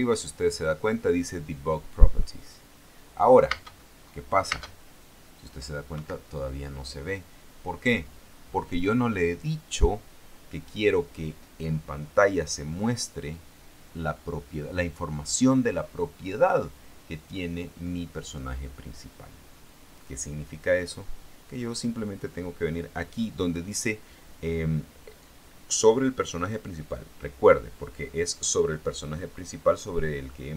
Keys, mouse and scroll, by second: 3.8 space, 5.2 space, 6.1 Escape.